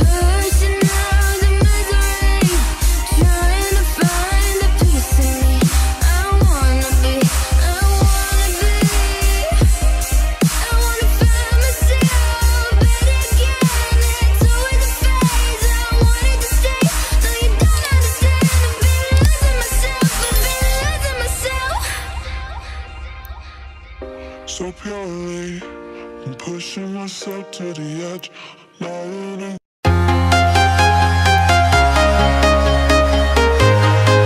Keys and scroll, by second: 1.2 ctrl+t, 32.5 ctrl+shift+a.